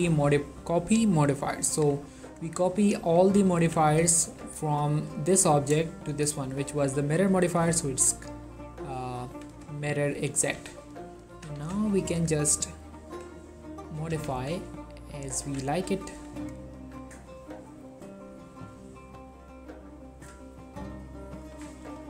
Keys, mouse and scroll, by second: 1.4-2.0 ctrl+middle drag, 2.4 click, 2.7 middle click, 3.2 click, 3.7 1, 4.3 ctrl+middle click, 5.2 click, 7.6 click, 8.0 shift+middle click, 8.1 shift+scroll down 2, 8.2 click, 8.9-9.4 middle drag, 9.4 1, 10.5 click, 10.7 Tab, 11.5 g, 11.8 x, 12.8 right click, 13.2 r, 13.9 click, 14.1 g, 14.5 x, 15.4 click, 15.5 Tab, 16.2 ctrl+middle click, 16.5 ctrl+click, 20.4 middle click, 20.7 scroll up 1, 21.5 click, 21.7 Tab, 21.9 middle click.